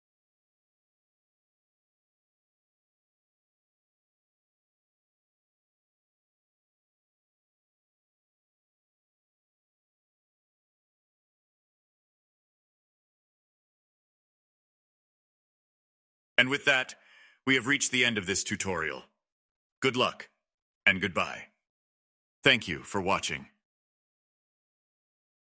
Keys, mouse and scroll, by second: 0.0-0.4 drag, 0.4 scroll down 3, 0.7 click, 1.9 middle click, 2.6 click, 3.0 click, 4.2 click, 4.7-5.9 drag, 5.9 scroll down 12, 6.5 click, 6.6 scroll down 1, 7.0-7.4 drag, 7.4-7.7 scroll down 13, 8.1-18.9 drag, 19.3 space, 20.9 Right, 21.3-22.8 right drag, 21.3 middle click, 24.2 scroll down 1, 24.4 right click, 24.4 middle click, 24.5 space, 24.9 space, 25.3-25.6 right drag.